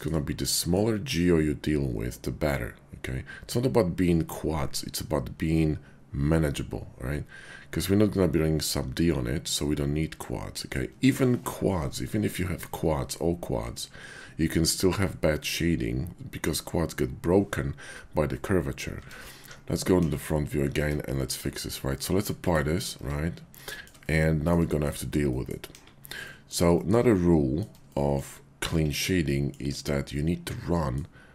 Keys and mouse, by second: 0.4 middle click, 10.5 shift+click, 18.4 middle click, 18.9 Tab, 19.4 `, 19.9 KP_5, 20.8 Tab, 21.9 q, 23.0 Tab, 23.7 shift+click, 24.0 click, 25.3 click, 25.7 KP_5, 26.2 click, 26.9 shift+click, 27.1 click, 27.9 shift+click, 29.2 shift+click, 30.1 middle click.